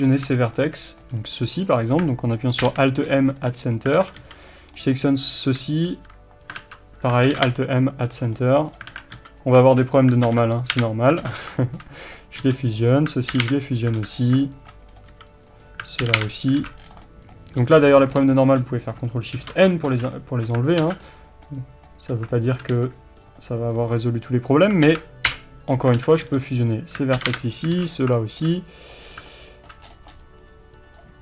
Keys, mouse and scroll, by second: 0.3-6.6 shift+middle drag, 3.4 alt+m, 4.0 alt+a, 4.5 b, 5.9 shift+r, 6.6 ctrl+z, 7.5 Return, 8.2 scroll down 1, 8.4 middle click, 8.9 alt+a, 9.4 b, 9.7 shift+middle click, 10.8 alt+m, 11.3 alt+a, 11.6 shift+middle click, 12.1-12.8 scroll up 1, 12.8 b, 13.5 alt+m, 13.6 Return, 14.0 alt+a, 14.2 scroll down 1, 14.5 shift+middle click, 15.0-15.5 scroll up 1, 15.5 b, 16.3 alt+m, 16.3 Return, 16.6 alt+a, 16.8 scroll down 1, 17.1-30.9 middle drag, 17.6 a, 19.4 ctrl+shift+n, 19.8 scroll down 1, 19.9 a, 20.8 alt+a, 21.0-21.6 scroll up 1, 23.3 b, 25.4 alt+m, 26.0 alt+a, 27.4 alt+m, 27.4 Return, 27.8 alt+a, 28.0 scroll up 1, 29.0 scroll down 1, 29.9-30.9 scroll up 1, 30.9 click.